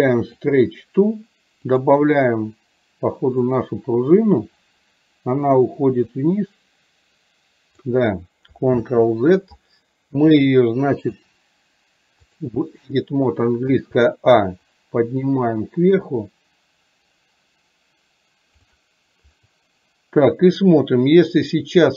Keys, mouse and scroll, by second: 1.7 click, 6.2-7.9 drag, 8.9 ctrl+z, 10.5-12.5 drag, 14.9-18.7 drag.